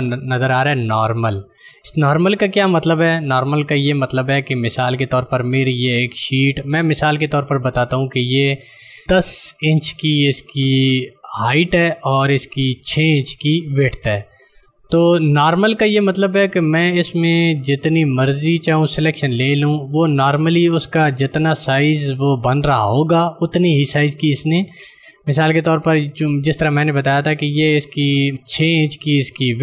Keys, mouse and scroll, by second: 1.5 click, 16.8 click.